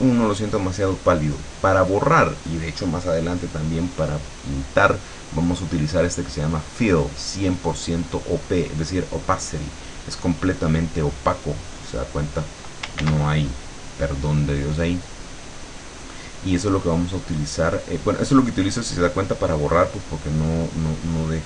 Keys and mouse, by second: 10.3 click, 11.9 click, 13.1 ctrl+z, 14.7 click, 16.6-19.5 drag, 19.7 click, 20.7-21.4 drag.